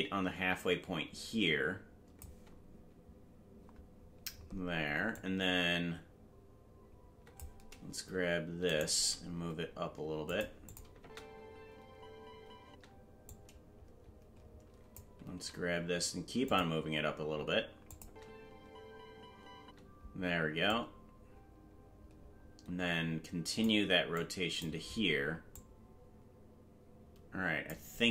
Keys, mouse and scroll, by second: 5.1-7.4 drag, 8.6 right click, 8.9 g, 10.6 click, 10.9 space, 13.2-14.9 drag, 13.2 space, 15.3 g, 17.8 click, 18.0 space, 20.6-23.6 drag, 20.6 space, 24.1 click, 25.5-27.7 drag.